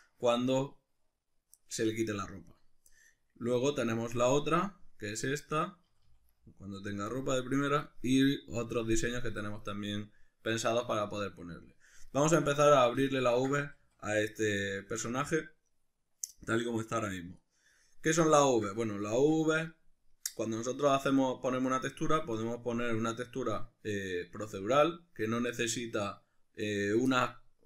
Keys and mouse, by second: 4.7 click, 5.9 a, 7.7 click, 8.8 right click, 12.8-27.6 shift+middle drag, 13.7 a.